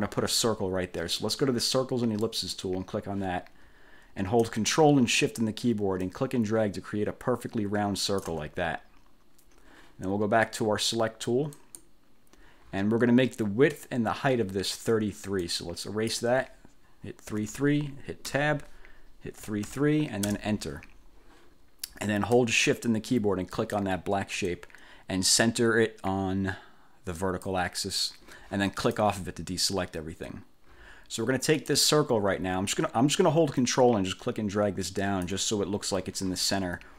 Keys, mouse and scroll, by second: 2.4 click, 6.1-8.5 ctrl+shift+drag, 11.7 click, 15.5 click, 17.5 3, 18.5 Tab, 19.5 3, 23.7 shift+click, 27.3 click, 28.9 click, 31.7 click, 33.7-35.5 ctrl+drag, 36.6 ctrl+scroll up 2.